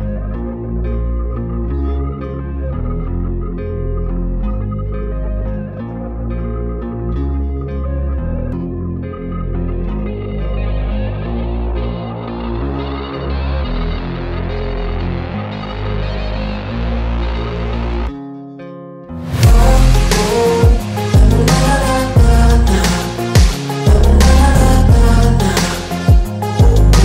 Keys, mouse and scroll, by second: 17.7 ctrl+t, 18.7 alt+shift+click, 22.5 Return.